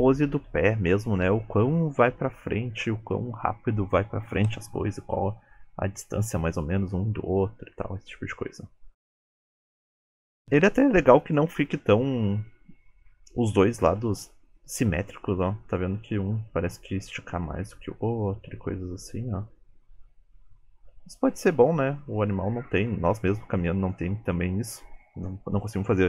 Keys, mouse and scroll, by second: 0.0 KP_3, 9.6 space, 11.3 click, 14.1 space, 25.0 space.